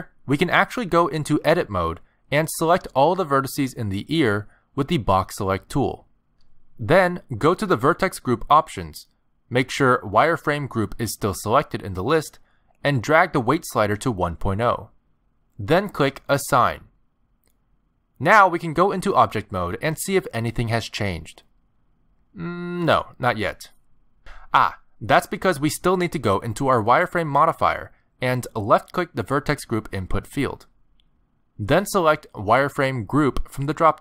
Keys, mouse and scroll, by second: 2.3 click, 3.8 middle click, 4.3 z, 5.2 b, 6.0 a, 6.2 b, 7.7 middle click, 8.1 z, 12.0 click, 17.6 click, 18.1 click, 18.7 middle click, 19.5 click, 22.4 middle click, 25.7 click, 29.3 click, 33.2 middle click.